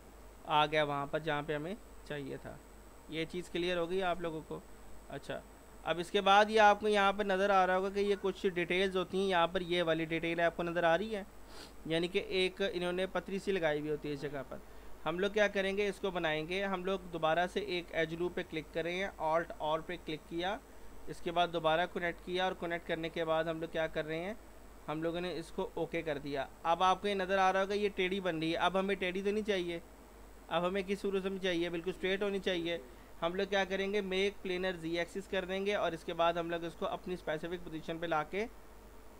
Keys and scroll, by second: 18.8 alt+r.